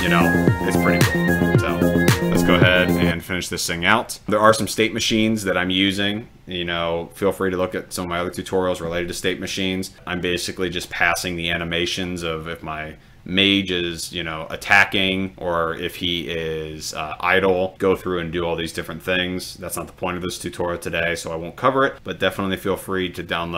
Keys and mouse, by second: 3.0 click, 4.3 click.